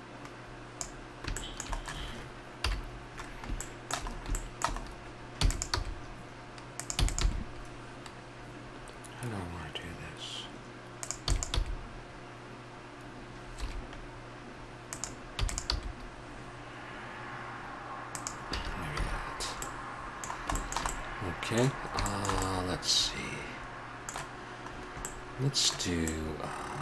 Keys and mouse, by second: 1.5 middle click, 2.5 KP_7, 5.4 e, 5.7 g, 6.9 e, 7.2 g, 11.3 e, 11.5 g, 15.0 g, 15.3 e, 15.7 g, 18.5 a, 18.9 a, 19.3-21.0 middle drag, 24.7-26.4 middle drag, 26.5 middle click.